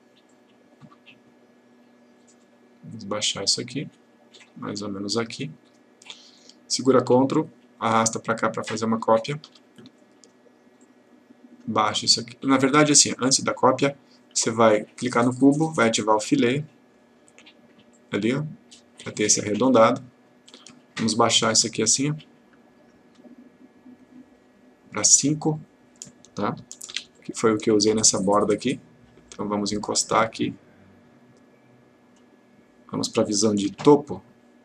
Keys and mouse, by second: 3.7-5.5 click, 7.2-9.7 ctrl+click, 13.3 click, 15.2 click, 26.9 5, 27.2 click, 29.3-32.4 click, 33.7 F3.